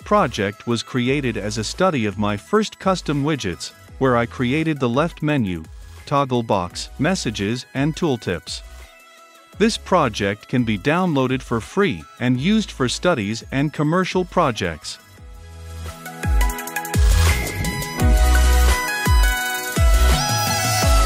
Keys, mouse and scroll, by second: 0.3-2.7 typing, 2.8 Return, 7.0-11.2 drag, 11.3 shift+h, 11.4 i, 11.6 Return, 13.3 shift+i, 13.8 1, 13.9 m, 14.5 Return, 15.1-15.6 typing, 15.8 Return, 19.2 shift+g, 19.5 o, 20.1 d, 20.2 Return.